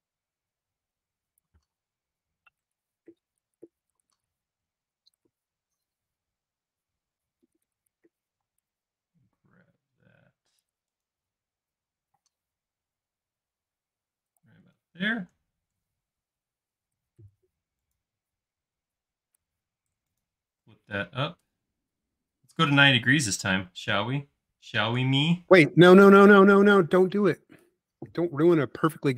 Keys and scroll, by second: 8.4 m, 15.2 q, 17.2 Left.